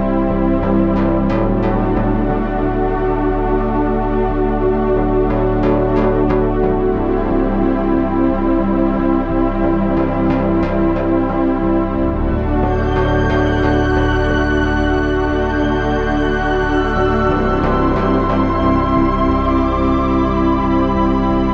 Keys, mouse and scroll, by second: 1.8 Tab, 3.4 KP_1, 5.0 ctrl+Tab, 5.6 Tab, 8.6 KP_7, 9.1 z, 9.9 Tab.